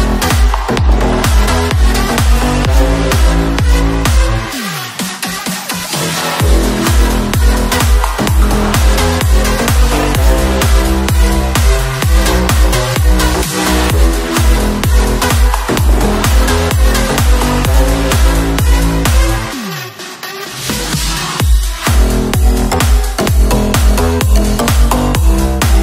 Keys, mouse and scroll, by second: 0.3 click, 3.0 click, 3.8 click, 4.7 scroll down 2, 5.3 click, 7.2 click, 8.0 click, 10.5 click, 11.9 click, 12.7 click.